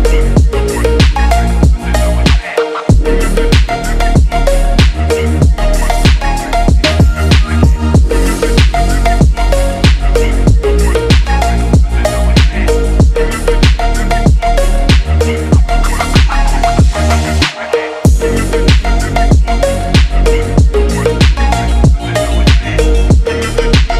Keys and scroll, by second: 10.4 ctrl+0, 10.7 ctrl+-, 18.8 BackSpace.